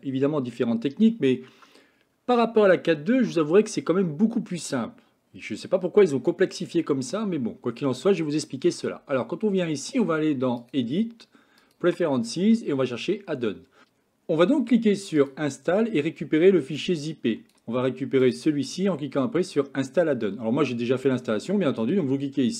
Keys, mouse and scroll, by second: 7.7 scroll down 2, 8.0-10.6 scroll up 3, 10.6-13.8 drag.